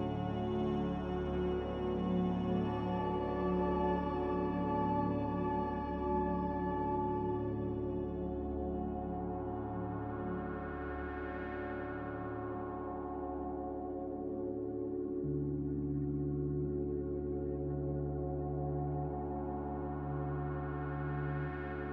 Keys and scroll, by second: 12.9 b, 13.5 Delete, 16.2 m, 16.9 z, 17.7 Delete.